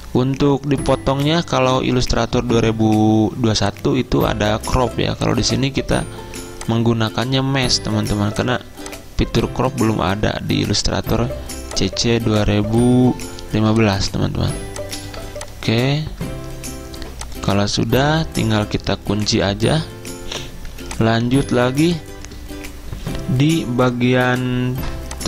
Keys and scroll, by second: 15.2 a, 19.4 ctrl+2, 20.7 z, 21.8 v.